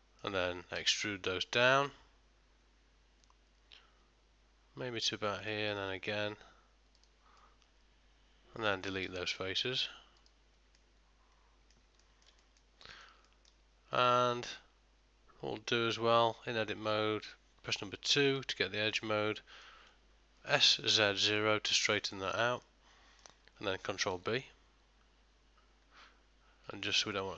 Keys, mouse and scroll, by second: 0.9 middle click, 0.9 e, 7.5 middle click, 9.1 x, 10.9 middle click, 12.1 ctrl+middle click, 12.5 shift+middle click, 12.9 middle click, 13.4 ctrl+middle click, 14.4 Tab, 16.3 2, 18.3 alt+click, 19.0 middle click, 20.7 middle click, 20.7 s, 24.2 ctrl+b.